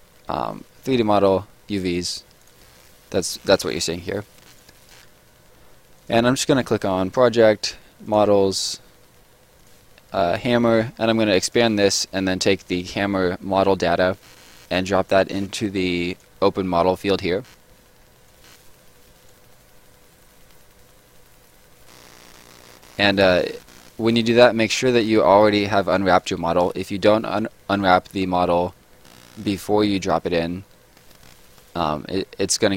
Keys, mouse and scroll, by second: 2.4 click, 4.2 right click, 6.0 click, 13.6 click, 16.1 click, 18.2 click, 22.7 scroll down 1, 22.9 middle click, 23.4-25.0 scroll down 1, 26.2 click, 30.9 scroll down 1, 31.0 middle click, 31.5-32.5 scroll down 1.